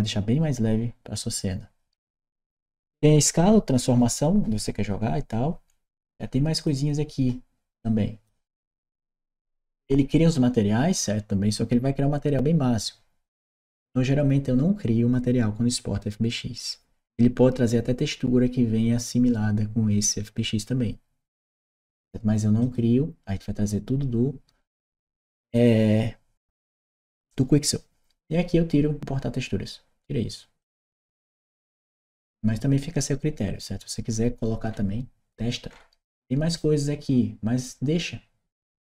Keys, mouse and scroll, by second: 5.5 middle click, 6.4 click, 7.6 click, 8.4 scroll down 1, 21.1 click, 22.5 click, 31.6 click, 34.5-35.1 scroll up 1, 35.5 middle click, 35.5 scroll down 1, 36.3 click.